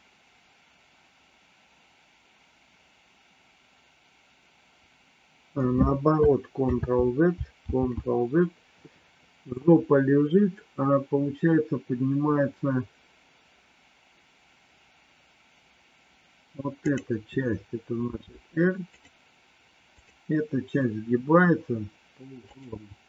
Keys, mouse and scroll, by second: 6.6 ctrl+z, 17.9 r, 22.5 click.